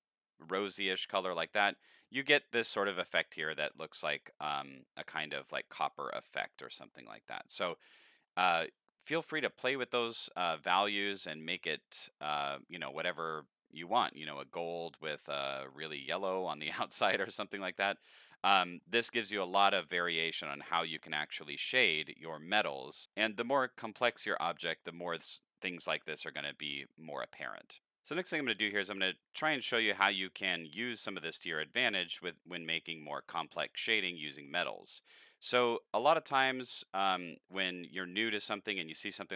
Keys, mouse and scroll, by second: 4.2 middle click, 6.9 middle click, 8.3 middle click, 9.4 click, 10.5 click, 11.7 click, 13.0 click, 14.5 click, 15.5 click, 18.6 middle click, 23.0 scroll up 1, 23.1 middle click, 27.7 middle click, 27.7 click, 27.8 scroll up 2, 33.6 scroll down 1, 35.4 middle click, 36.4 middle click, 37.5 middle click, 38.4 middle click, 38.4 scroll up 2.